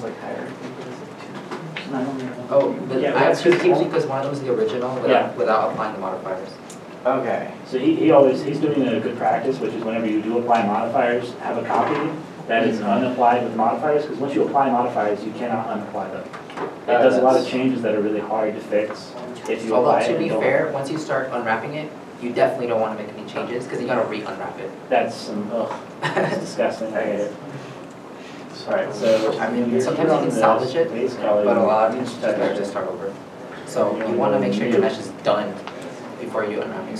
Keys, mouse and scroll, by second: 0.2 Tab.